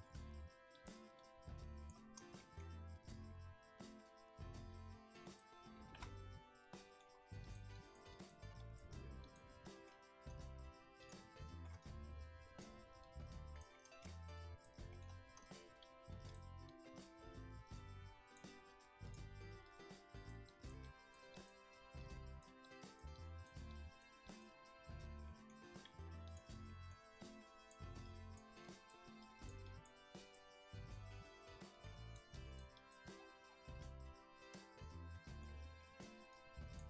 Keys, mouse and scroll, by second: 0.3 f, 1.1-2.3 drag, 2.3 middle click, 2.9-3.7 scroll down 1, 3.7-4.0 scroll up 2, 4.0-4.5 scroll down 1, 4.5-5.2 scroll down 1, 5.2 click, 5.8 ctrl+z, 6.3-6.7 scroll up 1, 6.7 shift+middle click, 7.4-9.7 drag, 9.7-11.0 shift+middle drag, 11.0 click, 11.4 shift+middle click, 11.8-13.7 drag, 13.7 middle click, 14.3 click, 14.9 shift+middle click, 15.0-15.4 scroll up 1, 15.4-15.9 scroll down 1, 15.9 f, 16.6-25.2 drag, 25.2 middle click, 25.8 f, 26.6 middle click, 27.1-33.1 drag, 33.1-33.6 scroll down 7, 33.6 middle click, 33.8-35.7 scroll up 6, 35.2 middle click, 35.7 middle click, 36.3-36.8 drag.